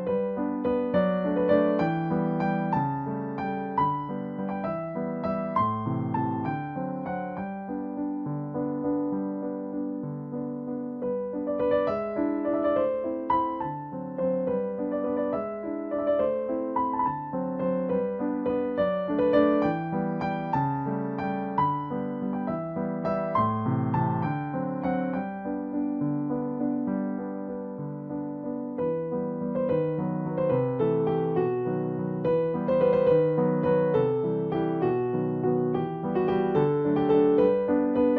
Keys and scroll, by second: 29.5 Left.